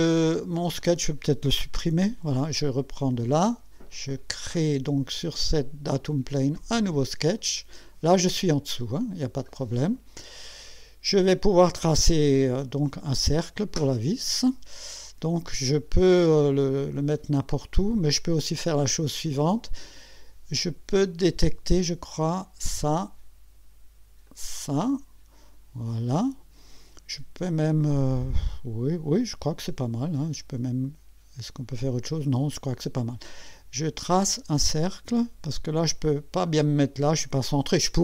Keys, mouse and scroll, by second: 0.8 click, 1.9 Delete, 2.7 click, 6.6 click, 8.1 scroll down 2, 8.8-9.5 right drag, 9.9 scroll up 1, 10.7-11.4 right drag, 21.3 click, 22.6 click, 24.3 click, 34.1 click.